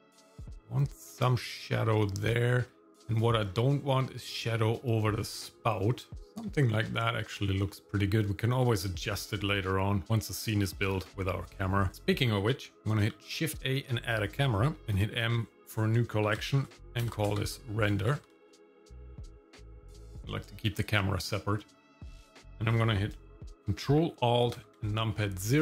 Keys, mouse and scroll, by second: 3.4-5.1 scroll up 2, 5.1-6.2 scroll up 1, 6.2 shift+middle click, 6.9 shift+middle click, 7.7 shift+middle click, 11.9 click, 13.1 shift+a, 14.8 m, 24.6 ctrl+alt+KP_0.